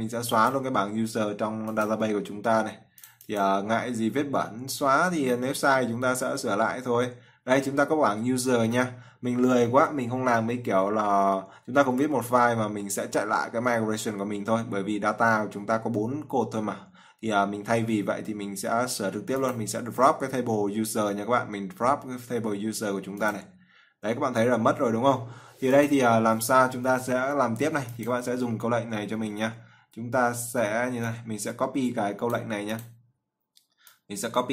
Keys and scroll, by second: 0.0-4.7 typing, 7.4-8.9 typing, 17.7-21.2 typing, 23.5-24.5 typing.